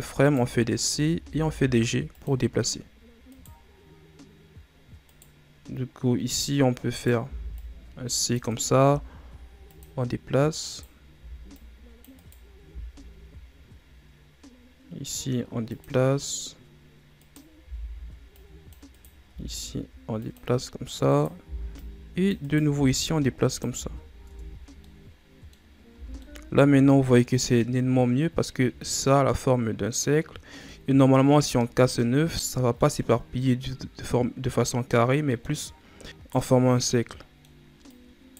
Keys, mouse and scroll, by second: 0.6-1.2 shift+scroll up 2, 1.2 g, 3.2 right click, 5.0 right click, 6.9 right click, 7.2 c, 8.8 g, 10.6 right click, 11.1 c, 12.6 g, 17.1 right click, 17.5 c, 19.2 g, 21.0 right click, 21.3 c, 22.6 g, 23.7 z, 24.2 Tab, 24.5 scroll down 1, 24.8-25.8 middle drag, 25.8 scroll up 1, 25.8 a, 26.1-27.8 middle drag, 27.8-29.0 scroll up 1, 29.0-31.8 middle drag, 31.8-32.3 scroll up 1, 32.3-33.1 middle drag, 33.1-34.6 scroll down 3, 34.6-35.6 middle drag, 35.6-36.0 scroll up 2, 36.0 right click, 36.7-37.8 middle drag, 37.8 right click.